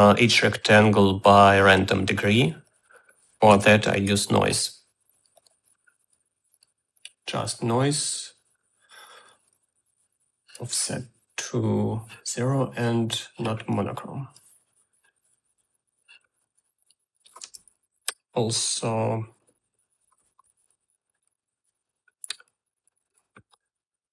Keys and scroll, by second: 4.3-5.3 typing, 18.6 Tab, 23.8 u.